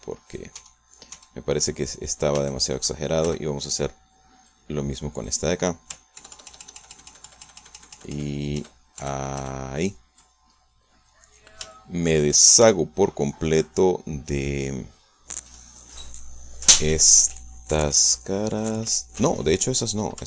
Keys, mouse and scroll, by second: 1.5 Tab, 2.5 middle click, 3.3 a, 4.2 b, 5.5 click, 7.1 ctrl+KP_Add, 11.9-13.2 middle drag, 13.6 c, 13.9-16.1 middle drag, 18.5-19.6 middle drag.